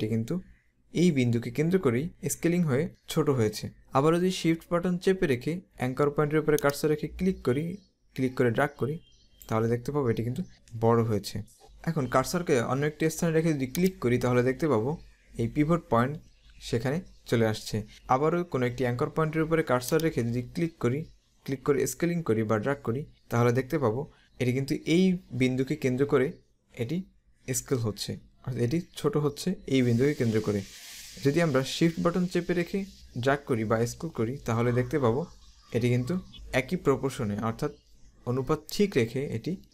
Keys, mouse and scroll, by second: 6.5 click, 13.9 click, 20.0 click.